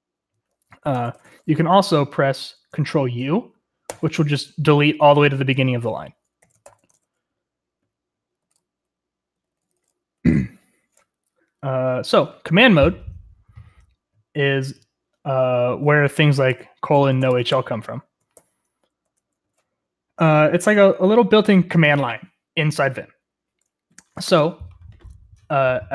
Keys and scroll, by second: 0.6-1.8 typing, 3.9 ctrl+u, 6.2-6.9 typing, 8.2-10.3 typing, 16.7-17.8 typing, 18.3 ctrl+c, 19.0 Escape.